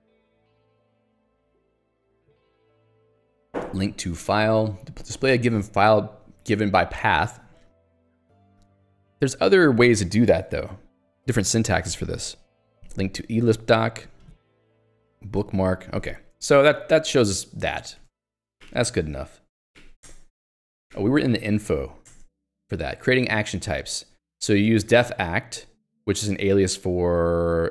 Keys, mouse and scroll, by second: 0.7 scroll up 1, 1.2-1.8 scroll up 1, 1.8-2.2 scroll up 1, 3.5 middle click, 11.5-14.3 scroll up 1, 15.2 scroll up 1, 15.8 scroll up 1, 16.8 click, 16.9 q, 17.8 ctrl+click, 18.2 Escape, 18.8 ctrl+alt+j, 19.8 ctrl+j, 20.1 Return, 20.4 Escape, 21.2 ctrl+alt+j, 21.5-22.3 typing, 23.9 j, 25.2 h, 26.2 l, 26.5 j, 27.2 h.